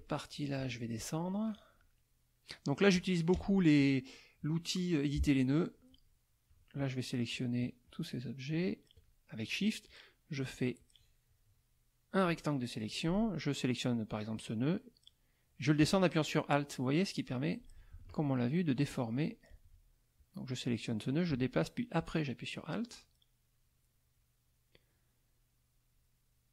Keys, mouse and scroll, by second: 0.6 F2, 1.0 click, 3.3 KP_Add, 4.0 middle click, 6.8 shift+click, 7.3 shift+click, 7.8 shift+click, 8.5 shift+click, 10.8-12.3 drag, 12.4 click, 14.3-17.8 drag, 18.8 alt+click, 20.2-26.5 alt+drag.